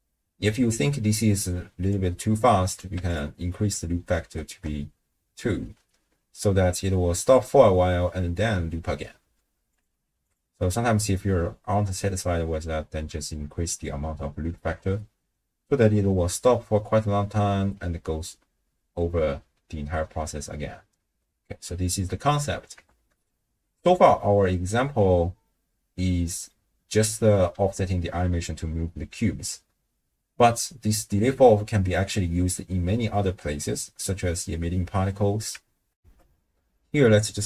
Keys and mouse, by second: 1.5 click, 2.7 click, 4.2 shift+space, 5.4 space, 9.2 space, 9.9 click, 14.5 shift+space, 21.1 space, 22.9 shift+space, 24.3 ctrl+click, 25.5-26.5 drag, 36.0 ctrl+alt+shift+w, 36.1 ctrl+alt+shift+q.